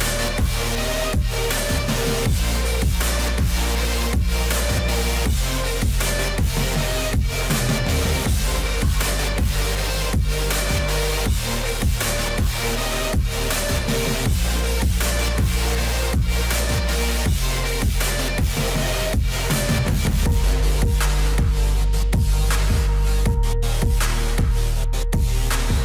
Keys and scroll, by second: 19.5 ctrl+z.